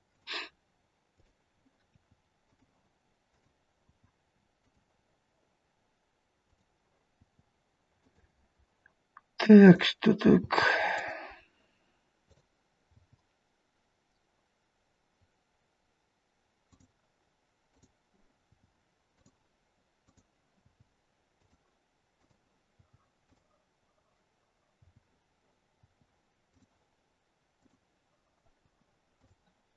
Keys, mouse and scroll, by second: 1.2 click, 1.8 i, 3.3 click, 3.8 i, 6.6 click, 7.2 i, 10.3 click, 10.3 i, 12.2 click, 12.9 i, 17.7 click, 18.5 i, 20.1 click, 20.5 i, 22.3 click, 22.7 i, 24.7 i, 27.6 click, 27.6 i, 28.5 i.